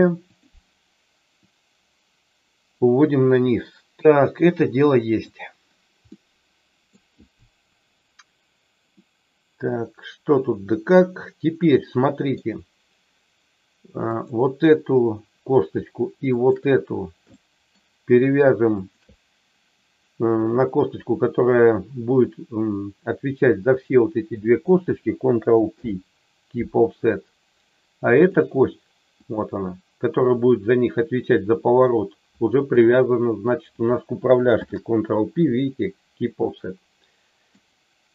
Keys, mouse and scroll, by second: 1.5-5.2 drag, 6.1 middle click, 8.9-12.3 middle drag, 16.3 shift+click, 17.3 shift+middle click, 18.8 shift+click, 25.7 ctrl+p, 28.2 click, 29.2 click, 34.6 ctrl+p, 36.4-37.6 middle drag.